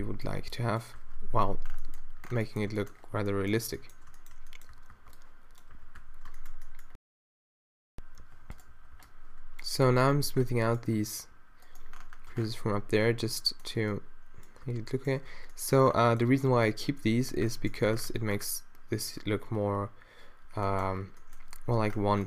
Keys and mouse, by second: 0.4-2.1 typing, 3.3 z, 3.6 z, 4.7 a, 4.9 b, 5.7 q, 6.0 q, 7.2-11.1 typing, 12.4 Tab, 14.6 Tab, 15.3 Tab, 17.9 a, 20.5 middle click.